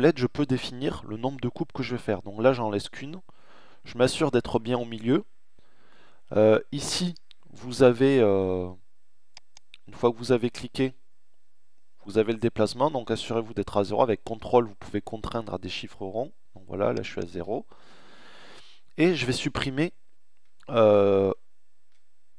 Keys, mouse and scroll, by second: 16.2-17.7 middle drag, 17.7 right click, 18.0-19.2 middle drag, 20.4-22.3 middle drag.